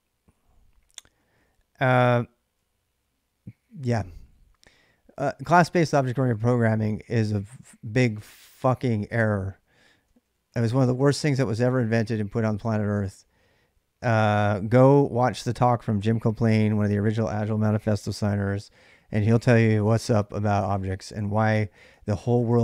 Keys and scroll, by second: 0.0-1.3 typing, 2.8-4.4 typing, 9.9-11.5 typing, 12.8 k, 21.6-22.3 k, 22.5 k.